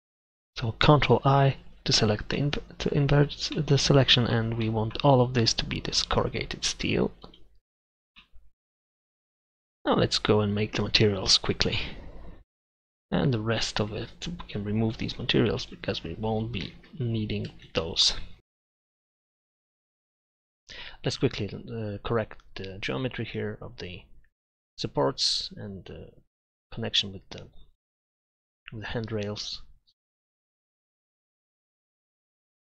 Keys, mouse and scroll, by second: 1.7 ctrl+i, 2.5-4.1 middle drag, 6.0 click, 8.9 click, 16.8 ctrl+shift+z, 17.7 ctrl+z, 19.1 Tab, 20.0 e, 20.4 Tab, 20.6 Tab, 20.9 e, 21.7 Tab, 21.8 Tab, 23.0 ctrl+r, 23.5 ctrl+z, 23.9 ctrl+KP_Add, 24.1 ctrl+r, 24.5 click, 24.6 right click, 25.5 click, 25.6 click, 26.2 click, 27.1 click, 27.5 click, 28.6-30.0 drag, 30.4 click, 30.9 middle click, 31.2 right click, 31.6 ctrl+KP_Add, 31.8 ctrl+r, 32.0 click, 32.2 right click, 32.6 middle click.